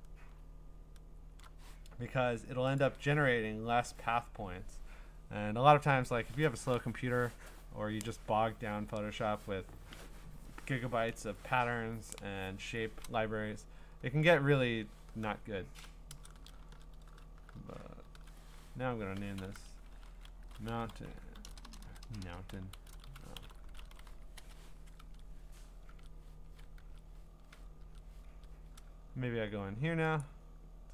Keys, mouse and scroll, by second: 0.0-1.4 scroll, 2.8 ctrl+click, 14.9 ctrl+click, 18.0 F4, 20.2-24.9 typing, 28.4 ctrl+Tab, 30.2 click.